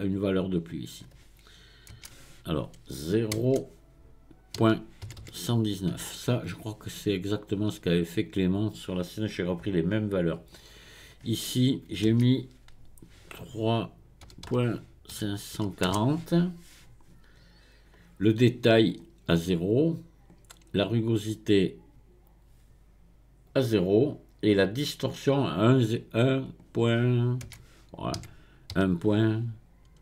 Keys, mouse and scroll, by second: 0.6-3.7 drag, 5.2 KP_1, 10.4-13.6 drag, 19.7-24.4 drag, 26.4-29.6 drag.